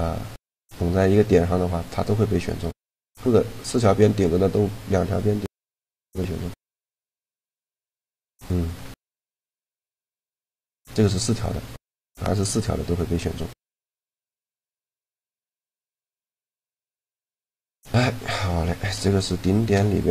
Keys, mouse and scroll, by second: 2.1-3.9 middle drag, 6.1 middle click, 7.2 shift+g, 9.1 a, 9.6-11.4 drag, 9.9 shift+g, 15.9 n, 17.9 a, 18.8 shift+g.